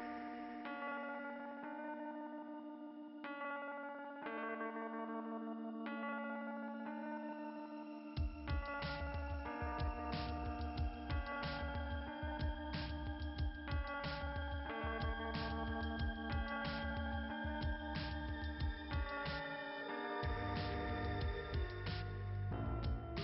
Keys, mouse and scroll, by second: 0.0 click, 2.2 click, 2.4 click, 5.0 click, 9.1 click, 9.7 click, 10.0 click, 10.4 click, 10.5 double click, 10.7 double click, 11.6 click, 12.0 click, 12.5 click, 13.3 click, 14.2 click, 14.8 click, 15.6 click, 16.0 click, 16.1 double click, 16.4 double click, 20.9 click.